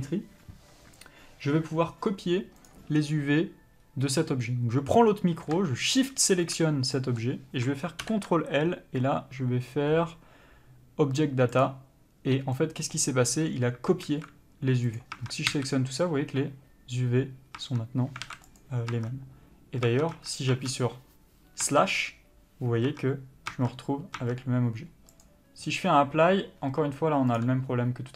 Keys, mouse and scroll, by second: 6.3 shift+click, 7.3 middle click, 12.0 ctrl+l, 12.9 middle click, 14.4 alt+a, 15.3 click, 15.5 Tab, 15.9 a, 18.0 Tab, 18.6 alt+a, 18.9 click, 19.2 Tab, 27.7 click.